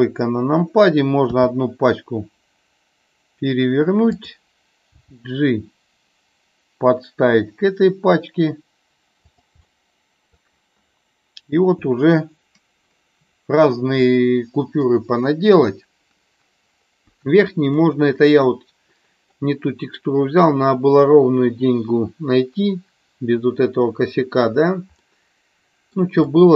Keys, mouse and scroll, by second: 1.3 r, 4.1 click, 9.6-10.3 middle drag, 17.8-19.3 middle drag, 25.0-26.0 middle drag, 26.2-26.5 middle drag.